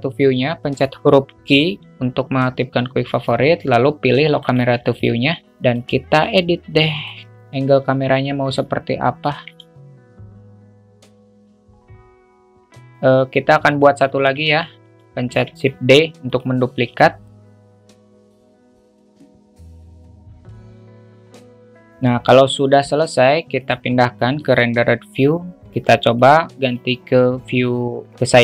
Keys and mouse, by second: 1.6 q, 5.7 alt+shift+middle click, 7.0 alt+shift+middle click, 9.8 alt+middle click, 10.2 click, 10.5 click, 10.8 click, 11.4 click, 14.9 shift+d, 16.8 q, 17.7 click, 17.7 g, 17.9 alt+middle click, 18.0 click, 18.2 alt+middle click, 18.3 click, 18.6 click, 19.2 KP_0, 19.5 click, 19.6 alt+middle click, 19.8 KP_0, 19.9 q, 20.0 alt+middle drag, 20.4 click, 20.6 click, 21.0 click, 21.0 g, 21.4 click, 21.6 q, 23.6 click, 24.7 drag, 26.1 drag, 26.6-27.8 drag.